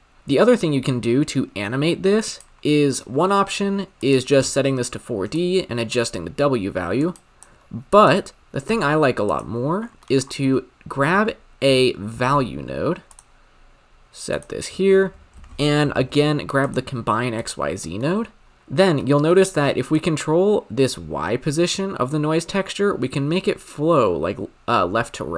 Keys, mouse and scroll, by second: 0.2 shift+a, 4.4-7.1 drag, 7.9-9.4 drag, 9.9 scroll down 8, 10.1 middle click, 10.3-11.3 scroll up 4, 11.3 shift+a, 16.7 shift+a, 20.0-22.9 shift+drag.